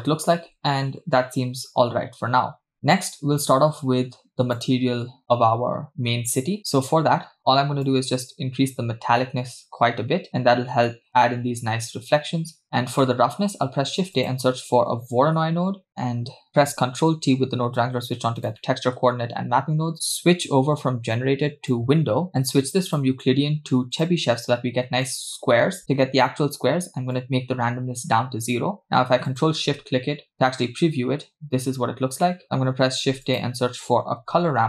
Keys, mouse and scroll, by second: 1.4-2.8 scroll down 1, 2.8 scroll down 2, 4.6 click, 6.6 middle click, 6.6-7.1 scroll down 2, 7.2-7.8 scroll up 2, 7.9-10.3 drag, 13.0 middle click, 13.8 shift+a, 15.9 click, 17.2 ctrl+t, 18.4 click, 18.6 middle click, 19.1-20.0 scroll up 2, 21.7 click, 22.4-22.8 scroll up 2, 22.9-24.2 drag, 24.7-25.1 scroll down 2, 25.1-25.5 middle drag, 27.1-28.0 drag, 28.8 click, 29.5 ctrl+shift+click, 32.2 middle click, 32.4 scroll down 3, 32.9 shift+a.